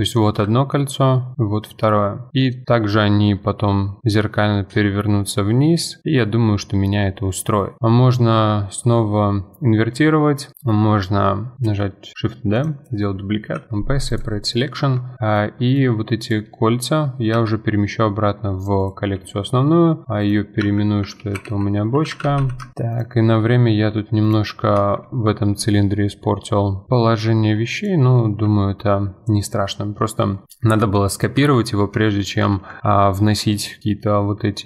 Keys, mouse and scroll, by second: 2.0-3.8 middle drag, 3.8 scroll up 2, 6.2 middle click, 6.9-8.7 scroll up 1, 11.6 shift+d, 13.5 p, 14.8 Tab, 15.3 click, 15.7 click, 16.2 click, 17.3 m, 20.2 click, 20.6 F2, 22.9 click, 24.3 click, 24.8 Tab, 26.9-27.7 scroll up 2, 27.8 alt+click, 30.4 Tab, 31.4 Tab, 31.8 2, 32.2 alt+click, 32.8 ctrl+x.